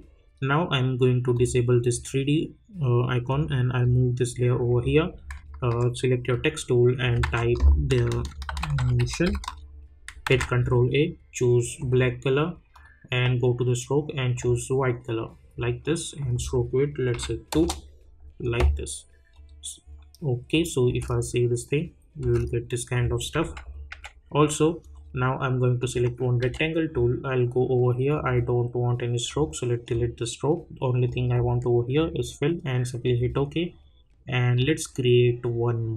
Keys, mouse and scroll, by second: 1.3-6.3 drag, 7.2 ctrl+a, 7.8-9.7 typing, 10.2 ctrl+a, 11.8 click, 17.5 Return, 18.4 click, 20.9 space, 23.4 j, 23.9 j, 24.8 click, 29.6 click, 30.0-35.9 drag.